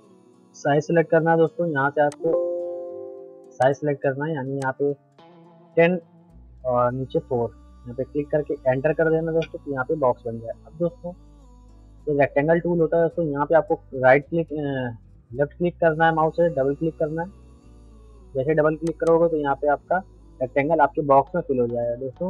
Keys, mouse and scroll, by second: 1.2 p, 2.1 click, 2.6 p, 3.6 click, 6.4 Tab, 18.8 click.